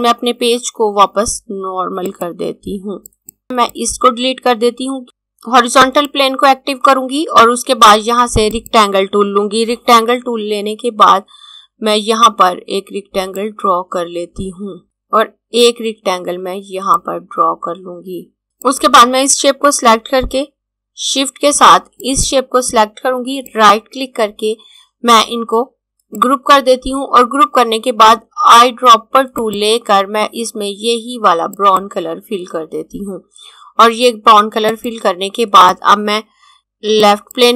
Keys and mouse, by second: 2.0 click, 6.0 click, 13.0 click, 17.0 click, 21.9 click, 23.5 right click, 26.2 click, 29.3 click, 34.6 click, 37.1 click.